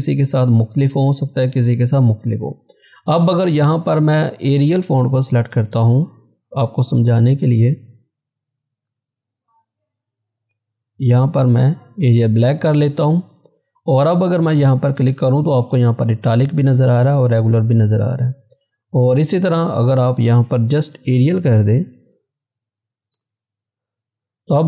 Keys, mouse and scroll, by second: 2.9 click, 5.3-5.8 typing, 8.7-9.4 typing, 12.0 click, 12.0 click, 18.5 click, 21.2 BackSpace, 23.2 Return.